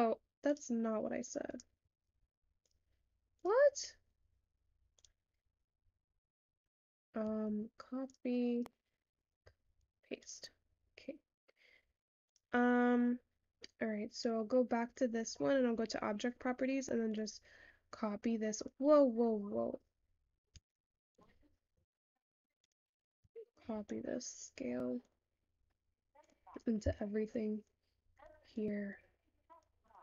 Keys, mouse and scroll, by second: 17.5-18.7 drag.